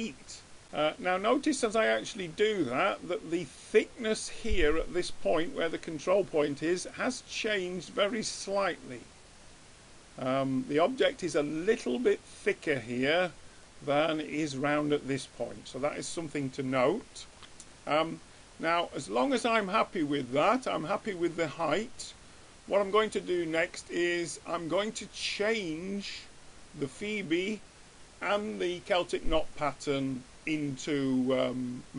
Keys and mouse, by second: 0.8-2.6 middle drag, 4.4 middle click, 5.7-9.7 middle drag, 13.1-14.3 middle drag, 15.4-19.6 middle drag, 22.4-25.7 middle drag.